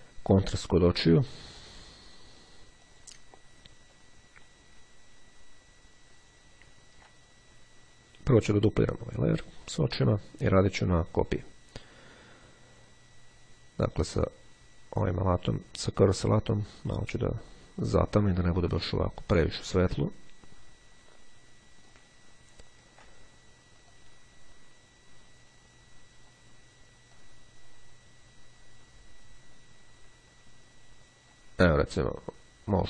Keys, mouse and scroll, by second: 1.1 click, 3.0 click, 4.8-5.4 ctrl+scroll up 2, 5.5-6.0 ctrl+scroll up 2, 6.2-6.8 ctrl+scroll down 2, 9.5 click, 14.4 click, 15.2 click, 18.0-22.4 drag, 22.4-23.0 ctrl+scroll down 2, 24.0-26.9 drag, 27.2-32.0 drag.